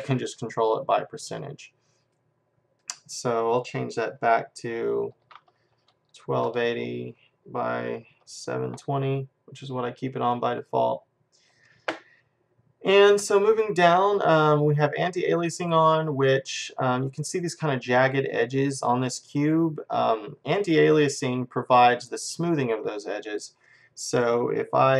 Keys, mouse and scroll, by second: 0.2-2.0 drag, 2.8-4.6 drag, 13.1-15.0 drag, 15.5-17.2 drag.